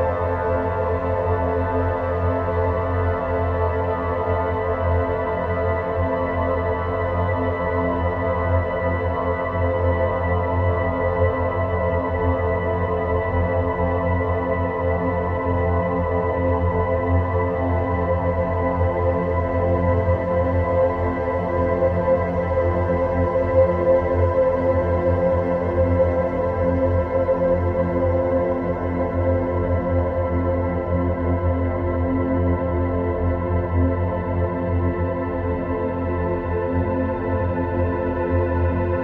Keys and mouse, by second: 1.6 shift+a, 3.2 shift+a, 5.0 click, 5.9 g, 9.5 click, 10.6 s, 11.9 g, 15.2 s, 16.1 g, 19.6 Tab, 20.0 middle click, 22.1 3, 23.6-26.2 drag, 27.4 click, 28.7-30.4 drag, 32.1 middle click, 34.8 ctrl+r, 37.2-38.9 drag.